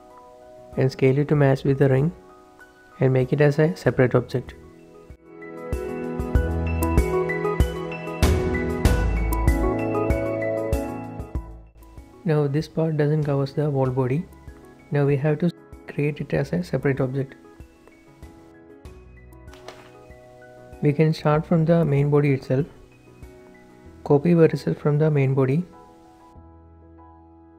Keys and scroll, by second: 1.1 typing, 4.2 g, 6.4 p, 8.2 Tab, 10.2 shift+h, 22.1 shift+Tab, 24.4 ctrl+shift+d, 25.1 Escape, 26.6 p.